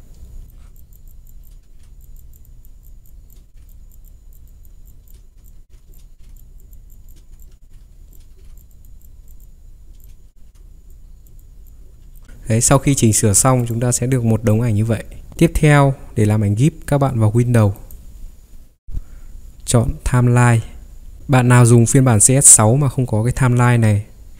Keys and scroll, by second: 0.5 ctrl+z, 1.7 ctrl+e, 3.5 ctrl+e, 5.7 ctrl+j, 6.1 ctrl+e, 7.6 ctrl+j, 7.8 Caps_Lock, 8.3 ctrl+e, 10.3 ctrl+e, 12.2 ctrl+3, 15.3 Escape, 21.2 ctrl+3.